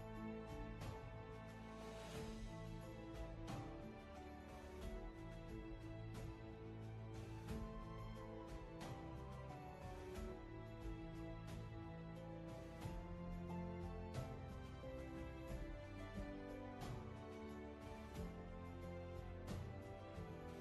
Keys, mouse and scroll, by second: 6.0 ctrl+z, 17.7 space.